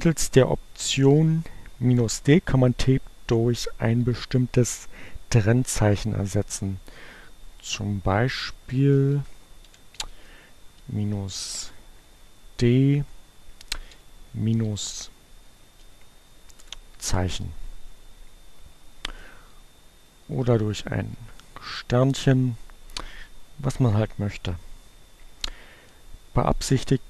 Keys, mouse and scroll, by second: 6.8 Up, 7.1 Left, 7.5 Left, 8.4 Left, 8.6 Right, 9.1 Right, 9.3 -, 9.8 d, 10.3 space, 11.6 shift+2, 12.4 -, 14.6 shift+2, 15.2 space, 16.2 Return, 17.6 Up, 19.3 Left, 19.6 Left, 22.0 shift+Return.